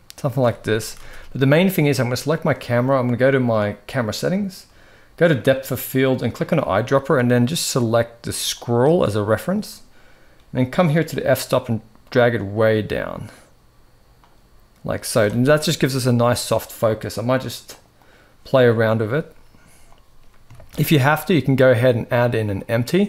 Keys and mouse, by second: 0.5 ctrl+s, 0.8 ctrl+s, 5.0 click, 6.1 click, 10.9-14.0 drag, 17.4 click, 17.7 click, 20.4 shift+a.